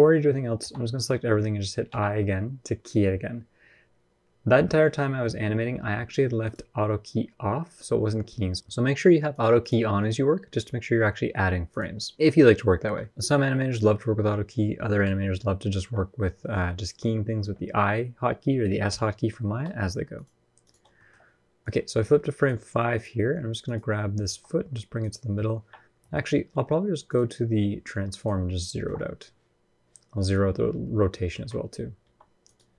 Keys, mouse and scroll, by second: 0.4 a, 1.7 i, 6.2 click, 9.1 click, 12.6 scroll down 1, 12.8 middle click, 13.0 middle click, 13.0-13.5 scroll up 3, 13.5 middle click, 14.8 ctrl+KP_1, 15.1 ctrl+KP_3, 16.2 shift+middle click, 16.3 shift+scroll up 1, 16.9-18.5 scroll up 1, 18.5 scroll up 1, 18.7 g, 19.9 click, 20.7 shift+middle click, 21.0 scroll up 1, 21.4 click, 24.0 g, 26.8 click, 31.1 alt+r, 31.8 g.